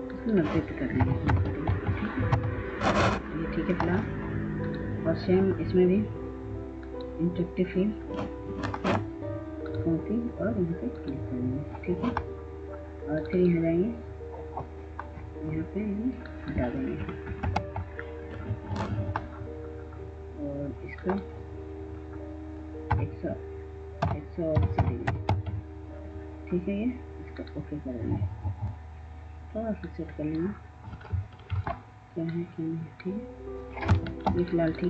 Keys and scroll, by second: 0.4-2.0 typing, 3.2-4.0 typing, 5.9-6.8 typing, 16.6-17.6 typing, 22.5 -, 23.6-25.4 typing, 33.7 ctrl+space.